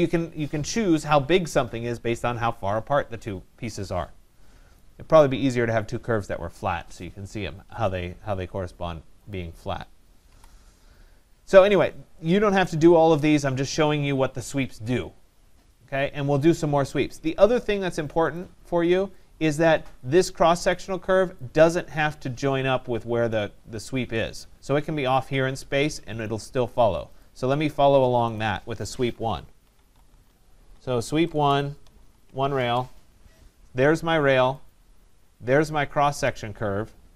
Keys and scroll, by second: 10.3 Delete, 31.3 BackSpace, 32.5 Return.